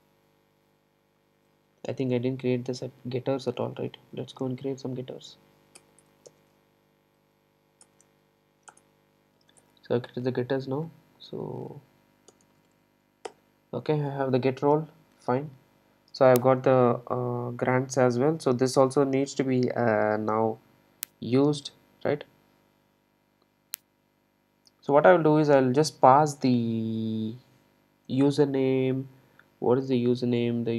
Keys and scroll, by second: 4.5 super+b, 7.8 super+n, 9.5 super+e.